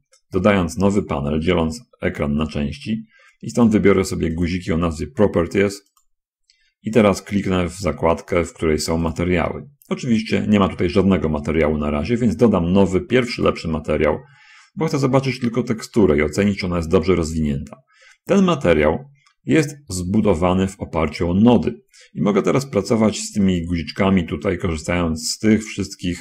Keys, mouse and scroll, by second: 4.0 click, 4.8 click, 6.3 click, 9.5 click, 13.8 click, 23.5 click.